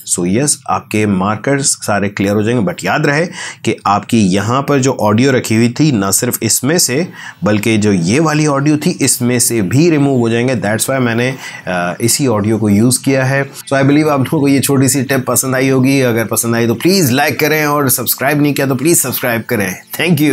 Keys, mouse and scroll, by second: 0.9 click, 6.5 scroll up 2.